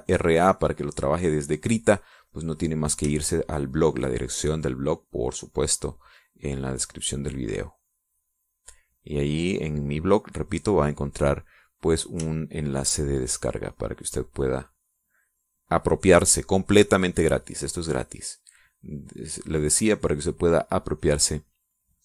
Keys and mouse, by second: 0.7 click, 3.5 click, 4.7-5.8 shift+drag, 6.3-10.6 drag, 10.7-12.3 drag, 13.7 shift+click, 14.5-20.6 shift+drag.